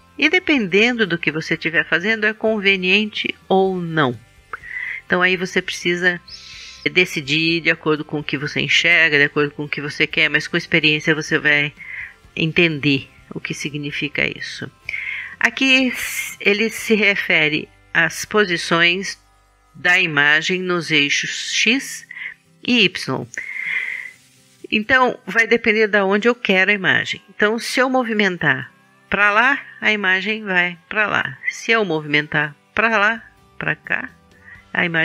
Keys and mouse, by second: 28.0-29.7 drag, 32.1-33.6 drag, 34.2-35.0 middle drag.